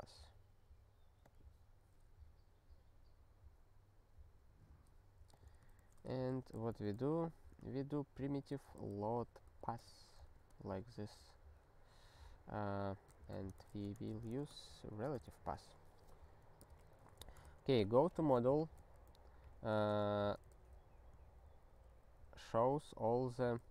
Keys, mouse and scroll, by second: 1.2 click, 5.3 click, 5.8 Return, 5.9-7.4 typing, 8.5 ctrl+n, 8.7 ctrl+n, 8.9 ctrl+n, 9.0 ctrl+n, 9.2 ctrl+n, 9.6 Return, 9.9 ctrl+s, 10.3 space, 12.8-13.8 typing, 14.1 ctrl+n, 14.9 alt+^, 15.4 ctrl+s, 16.6 alt+x, 17.6 Return.